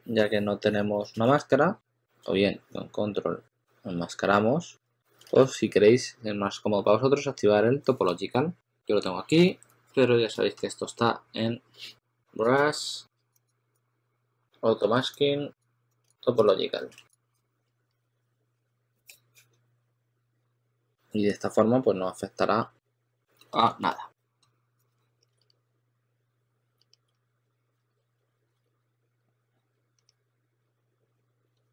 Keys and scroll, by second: 17.9 2, 19.7 2, 20.1 2, 23.6 super+z, 25.3 shift+s, 26.7-29.7 typing.